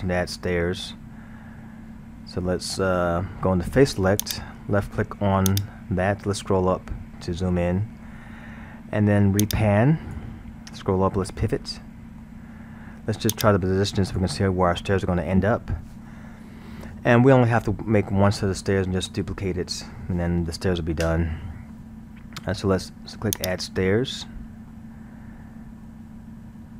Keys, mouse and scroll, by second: 4.2 click, 5.5 click, 6.2 scroll, 9.4 click, 10.6 scroll, 11.3-13.3 middle drag, 13.3 click, 23.4 click, 24.7-26.7 middle drag.